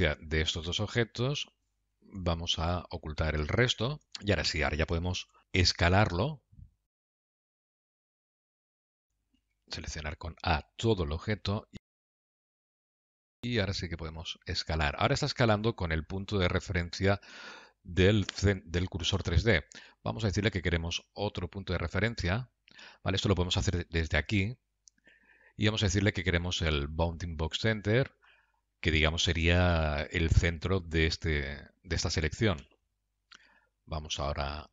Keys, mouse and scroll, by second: 0.2 shift+click, 3.9 KP_1, 4.2 click, 5.5-6.3 scroll down 3, 7.1 Tab, 7.9 click, 8.8 alt+z, 9.9 Escape, 10.3 s, 11.4 a, 13.4 s, 21.4 Tab, 22.5 Tab, 25.2 click.